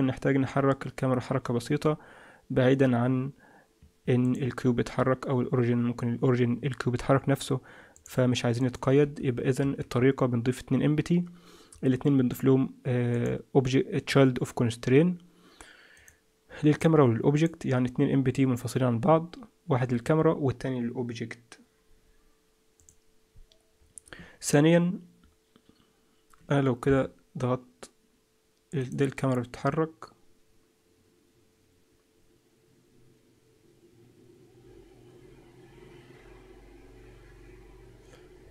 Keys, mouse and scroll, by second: 0.4 g, 4.2 click, 7.9 click, 8.6 click, 9.0 g, 13.1 click, 16.0 click, 17.4 click, 26.8 KP_0, 28.8 click.